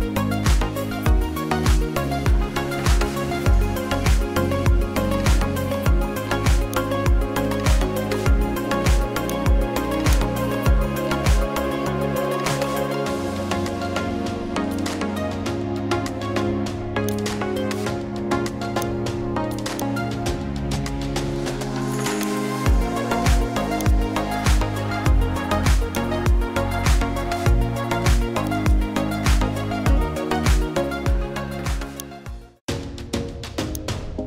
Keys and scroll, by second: 7.5 Delete, 11.0-16.1 typing.